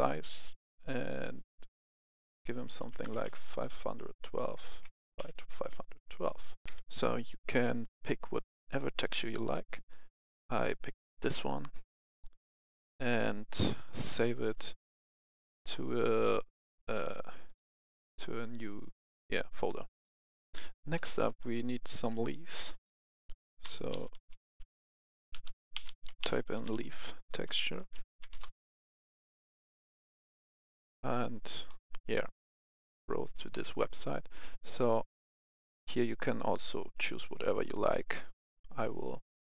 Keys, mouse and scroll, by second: 2.7 KP_5, 3.2 KP_2, 4.3 Tab, 4.7 KP_5, 4.9 KP_1, 5.1 KP_2, 6.2 click, 6.6 F10, 10.7 click, 12.4 right click, 13.9 click, 20.3 F10, 20.9 click, 23.6-24.5 typing, 25.7-27.4 typing, 28.0 Down, 28.3 Return, 30.3-31.0 scroll down 1, 31.6 middle click, 33.0 click, 37.2-38.0 scroll down 1.